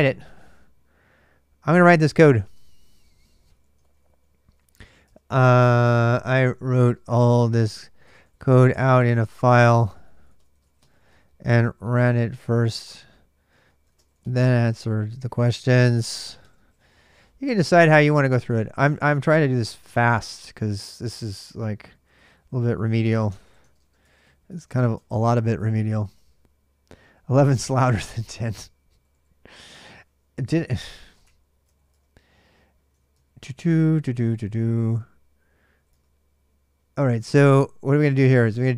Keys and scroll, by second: 2.2 super+Tab, 3.5-25.7 typing, 24.7 Return, 25.4 ctrl+[, 25.8 Return, 28.7 ctrl+a, 28.9 ctrl+a, 30.5-32.1 typing, 33.0 ctrl+a, 33.2 ctrl+a, 33.9 ctrl+[, 34.0 ctrl+j, 34.1-37.9 typing.